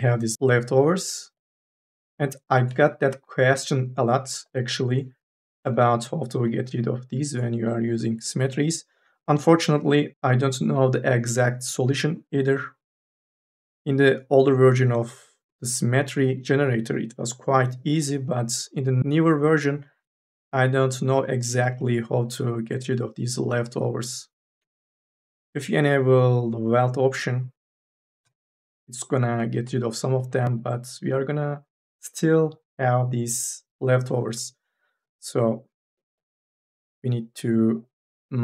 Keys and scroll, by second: 38.2 3.